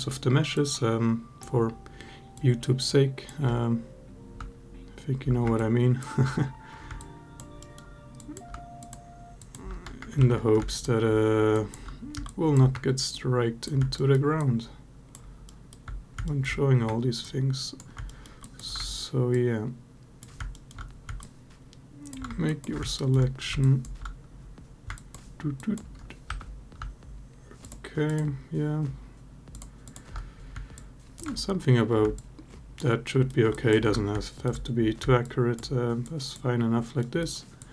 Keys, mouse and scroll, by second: 0.4 ctrl+click, 2.2 ctrl+click, 5.4 ctrl+click, 6.8 alt+click, 7.4 alt+middle click, 8.0 alt+click, 10.0 ctrl+z, 10.5 alt+shift+click, 11.3 alt+click, 12.0 alt+click, 12.9 ctrl+click, 13.7 alt+middle click, 14.2 alt+click, 16.0 alt+middle click, 17.2 ctrl+click, 17.9 alt+middle click, 18.2 alt+click, 19.2 ctrl+click, 20.3 alt+middle click, 21.0 alt+click, 22.3 ctrl+click, 22.8 alt+middle click, 23.4 alt+click, 24.8 ctrl+click, 25.5 ctrl+click, 26.1 3, 27.4 shift+click, 29.6 shift+click, 30.5 alt+click, 31.9 alt+click, 32.8 alt+middle click, 33.3 alt+click, 34.0 alt+middle click, 35.0 alt+click, 35.8 alt+click, 36.8 alt+middle click, 37.4 alt+click.